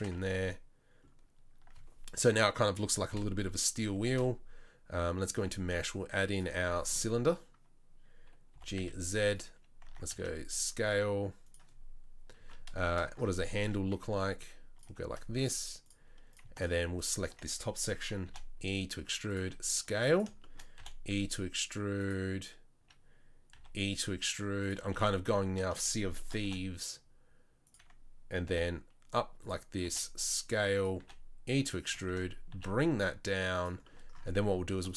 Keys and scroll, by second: 0.1 Tab, 3.1 KP_7, 4.1 shift+a, 8.5 g, 9.8 Tab, 10.1 s, 14.1 s, 18.3 e, 19.4 s, 20.8 e, 23.6 e, 24.8 s, 26.4 e, 28.5 e, 29.8 s, 31.0 e, 32.5 s.